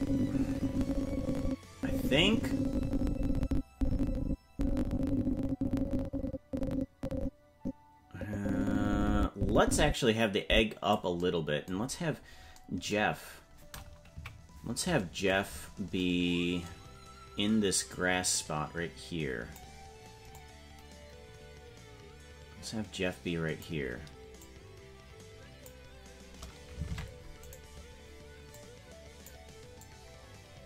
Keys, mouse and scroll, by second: 11.8-13.4 scroll down 9, 14.1 KP_Decimal, 15.3-15.8 scroll down 6, 17.8-19.5 drag, 20.3-23.6 drag, 24.3-25.6 drag, 26.8 ctrl+Tab, 27.4 right click, 28.5 click, 29.7-30.6 drag.